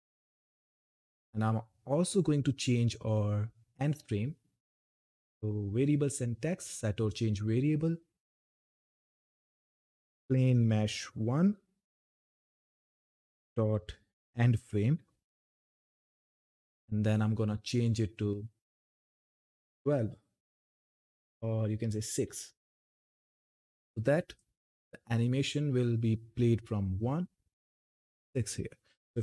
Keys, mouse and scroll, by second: 1.8 click, 6.8 click, 9.1-10.8 typing, 13.9-15.3 typing, 17.5 click, 24.1 click.